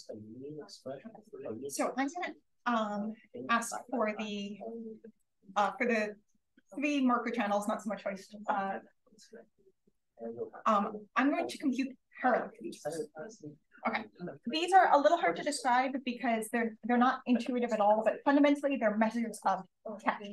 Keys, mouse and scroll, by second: 3.8 click, 4.5-7.4 drag, 12.5-17.8 drag.